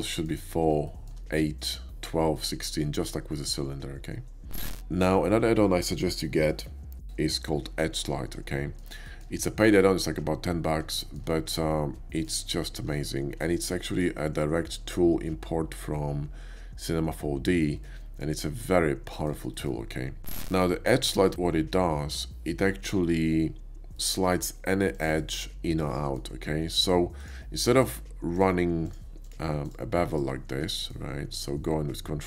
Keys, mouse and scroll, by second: 0.1 middle click, 0.9 shift+middle click, 1.6 shift+middle click, 2.3 shift+middle click, 8.5 shift+middle drag, 9.1 shift+middle click, 9.5 shift+middle drag, 10.9 shift+middle click, 11.7 shift+middle click, 13.1 shift+middle click, 13.7 shift+middle click, 14.5 shift+middle click, 17.8 middle click, 18.7-19.3 shift+middle drag, 19.5 shift+middle click, 20.6 middle click, 21.1 shift+middle click, 21.4 shift+middle click, 24.9 click, 25.9 middle click, 27.2 ctrl+click, 27.8 ctrl+click, 28.9 ctrl+click, 29.2 ctrl+click, 29.7 ctrl+click, 30.1 ctrl+click, 30.7 ctrl+middle click, 31.2 ctrl+b.